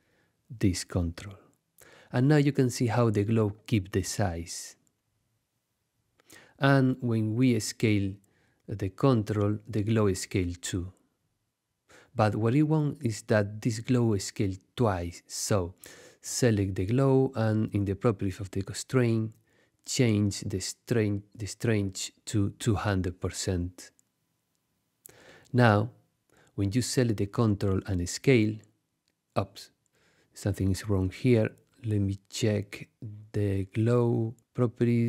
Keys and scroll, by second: 10.3 shift+super+z, 10.8 super+z, 22.5 2, 22.9 0, 23.8 Return, 29.8 shift+super+z, 30.4 super+z.